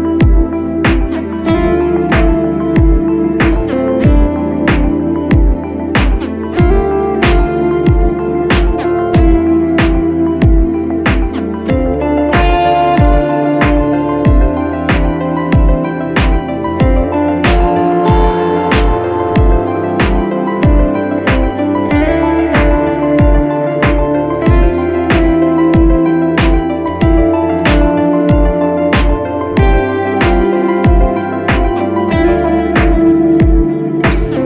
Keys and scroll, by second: 0.6 x, 3.9 x, 5.4 Escape, 5.5 space, 6.2 r, 6.6 x, 9.9 space, 10.1 ctrl+d, 11.2 x, 13.0 Escape, 14.6 x, 15.0 ctrl+z, 15.6 ctrl+space, 17.9 ctrl+space, 20.0 b, 20.3 x, 21.6 x, 21.9 x, 24.2 space, 26.6 ctrl+space, 28.7 space, 29.8 ctrl+z, 29.9 space, 31.9 space, 33.2 b, 33.9 x, 34.3 ctrl+space.